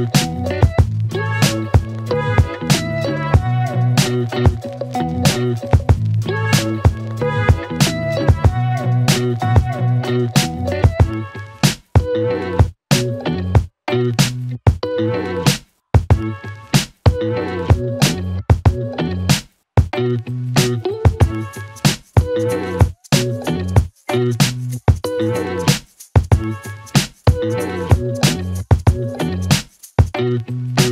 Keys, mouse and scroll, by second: 0.1 click.